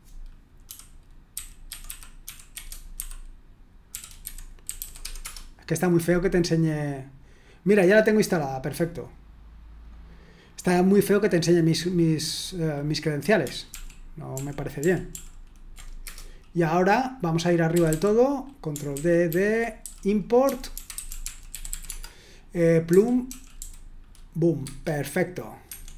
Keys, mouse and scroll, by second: 10.4 click, 13.7 ctrl+p, 14.3 ctrl+p, 14.8 ctrl+p, 15.1 ctrl+p, 17.7 typing, 18.9 ctrl+d, 19.3 ctrl+d, 19.5-23.3 typing, 24.6-25.9 typing.